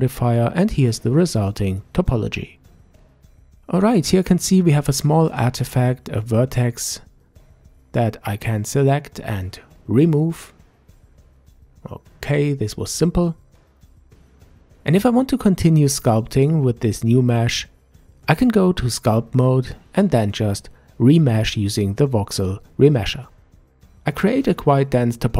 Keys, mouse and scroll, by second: 0.0 middle click, 0.8 scroll up 2, 1.8-3.9 middle drag, 3.9 scroll up 2, 5.7-7.0 right drag, 7.8 click, 9.2 Delete, 12.0-12.4 scroll down 3, 12.4-15.4 middle drag, 16.3-16.7 scroll up 1, 16.7-17.6 scroll down 1, 17.6 Tab, 19.4 ctrl+Tab, 22.7 alt+m, 24.3-25.3 drag.